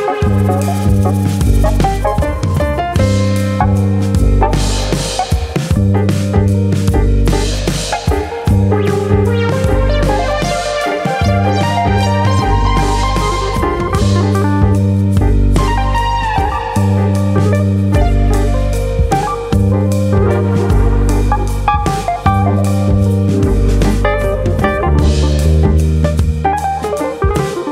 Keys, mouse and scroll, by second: 5.0 click, 6.1 3, 6.8 alt+click, 7.6 ctrl+KP_Add, 9.2 ctrl+KP_Add, 10.0 s, 16.5 click, 16.7 middle click, 17.3 shift+middle click, 17.5 middle click, 18.1 click, 21.2 1, 21.3 click, 21.8 click, 23.1 click, 24.1 shift+click, 24.6 shift+click, 25.3 middle click, 25.6 middle click, 26.6 click, 27.2 ctrl+KP_Add.